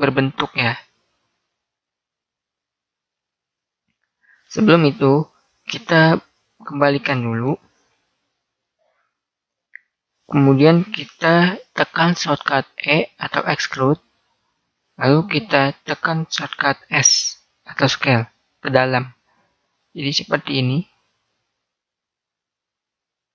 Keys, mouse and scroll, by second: 3.5-8.0 middle drag, 8.8 ctrl+z, 9.2-10.9 middle drag, 12.9 e.